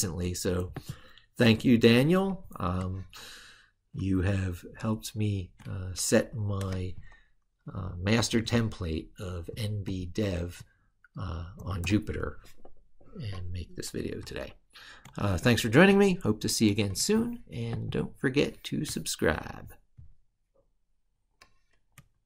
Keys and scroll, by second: 3.8 ctrl+super+Left, 15.6 ctrl+super+Right.